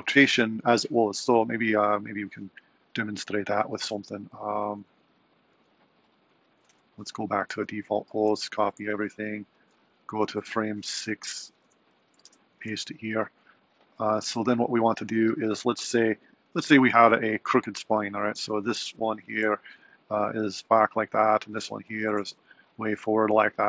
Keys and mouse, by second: 2.1 Right, 4.2 Left, 4.4 Left, 5.1 Right, 5.3 Right, 5.7 Right, 6.4 Left, 7.6 Left, 8.2 a, 8.4 super+c, 9.6 alt+Right, 11.6 Left, 11.9 Right, 12.4 super+v, 14.9 click, 18.1 click, 19.3 r, 21.6 click, 22.1 r.